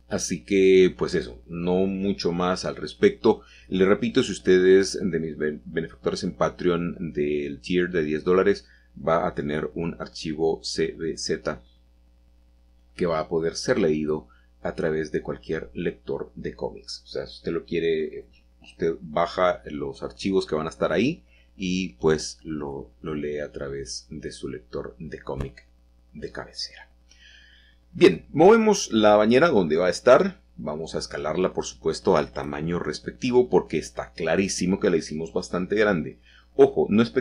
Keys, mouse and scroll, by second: 0.5-1.5 scroll down 1, 7.1 middle click, 7.5-8.0 scroll down 2, 10.0 alt+h, 10.8-11.1 scroll down 2, 13.5 middle click, 13.5-14.6 scroll up 1, 14.7 shift+middle click, 14.9-17.1 shift+middle drag, 17.5 g, 18.1 x, 19.2 Escape, 20.3-20.7 scroll down 3, 22.2-23.3 shift+middle drag, 22.6 click, 23.6 middle click, 24.2 click, 25.1 g, 29.4-30.5 drag, 30.7 s, 32.4-33.5 drag, 33.6-34.4 typing, 36.1-37.0 drag, 37.0 typing.